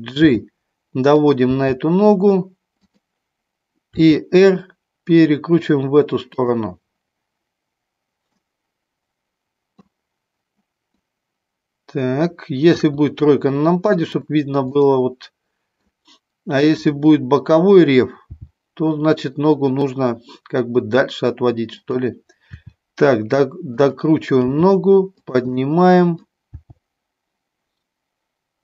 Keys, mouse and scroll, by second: 0.2 g, 1.2 click, 1.4 g, 2.8 click, 3.8 r, 6.3 click, 8.3-9.8 middle drag, 10.9-12.3 middle drag, 12.5 KP_3, 14.7-15.8 middle drag, 16.8 click, 18.3 g, 21.7 click, 22.4 r, 23.7 click, 24.4 g, 25.3 click, 25.5 middle click, 26.5 g.